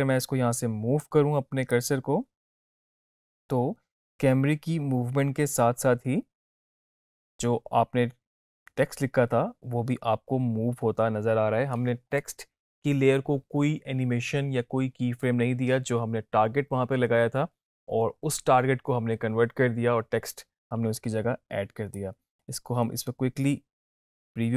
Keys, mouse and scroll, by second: 0.1-1.3 drag, 22.1-22.5 drag.